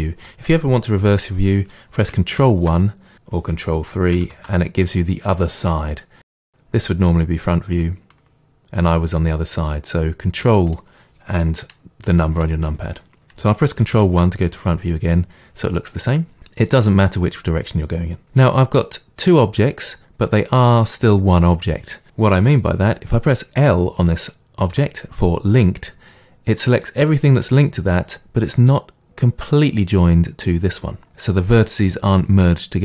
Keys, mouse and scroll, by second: 2.4 ctrl+KP_1, 3.7 ctrl+KP_3, 4.2 ctrl+KP_1, 6.5-6.9 middle drag, 13.9 ctrl+KP_1, 13.9-32.8 middle drag, 24.7 l.